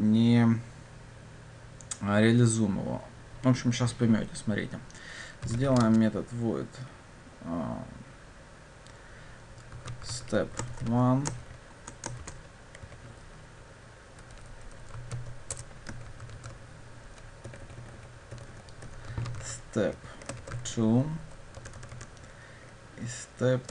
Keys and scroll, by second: 15.6 Return, 16.4 ctrl+d, 17.5 Delete.